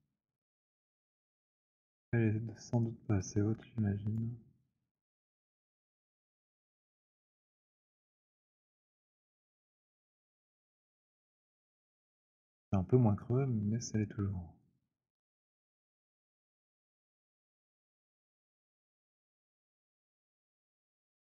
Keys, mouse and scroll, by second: 1.4 click, 4.1 click, 6.8 click, 14.9 click, 17.1 click, 18.9 click, 21.0 click.